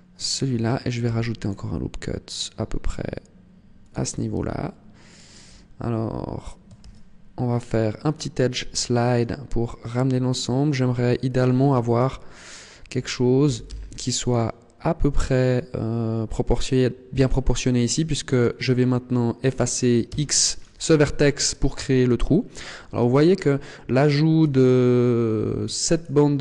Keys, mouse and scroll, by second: 0.3 click, 0.9 ctrl+r, 4.9 click, 4.9 alt+right click, 6.7 ctrl+e, 12.2 click, 12.2 alt+right click, 13.3 g, 14.2 click, 17.9 right click, 20.0 x, 21.0 middle click, 24.4 alt+right click, 25.8 alt+shift+right click.